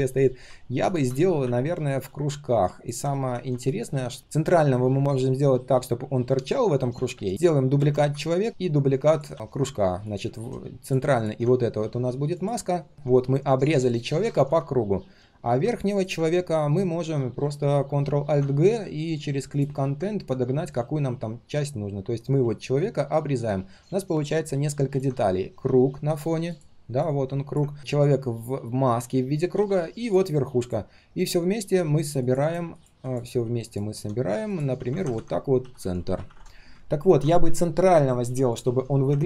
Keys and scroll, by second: 4.2 ctrl+], 7.8 ctrl+d, 9.3 ctrl+d, 14.3 ctrl+z, 18.2 ctrl+alt+g, 27.7 ctrl+z, 29.5 ctrl+z, 34.7 ctrl+g, 35.1 ctrl+r.